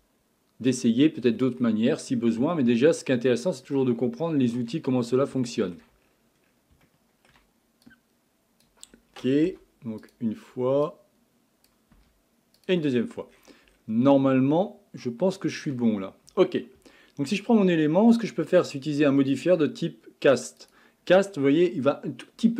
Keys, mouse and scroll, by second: 1.2-2.5 scroll down 11, 2.5-4.9 ctrl+middle drag, 4.9-5.4 scroll up 7, 5.4 shift+middle click, 6.0-6.8 scroll up 10, 6.8-7.8 shift+middle drag, 7.8 click, 9.5 Delete, 10.9 click, 11.9 Delete, 12.9-14.2 scroll down 19, 14.2-16.8 shift+middle drag, 16.8 Tab, 18.5 click, 19.3 click, 20.7-22.4 drag.